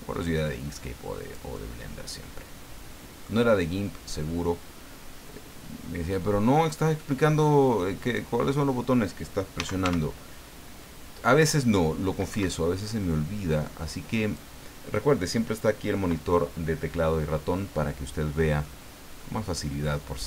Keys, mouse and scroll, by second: 1.5-3.4 middle drag, 3.5 scroll up 1, 4.2 scroll up 1, 6.1-8.3 drag, 9.3-10.3 typing, 12.3 Escape, 13.5 click, 18.6-20.2 middle drag.